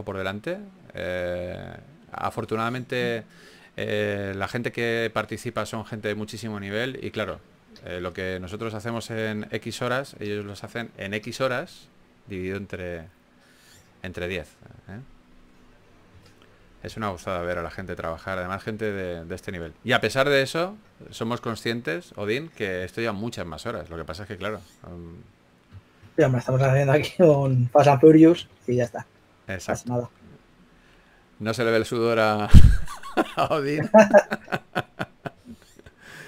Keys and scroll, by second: 0.0-0.6 typing, 3.4-4.0 typing, 12.3-13.4 typing, 22.6-24.2 typing, 26.8-31.2 typing, 35.3-36.1 typing.